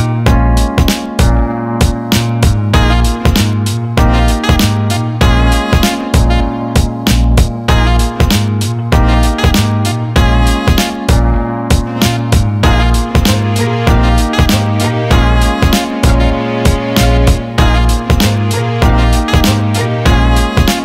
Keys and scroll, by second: 19.9 ctrl+z.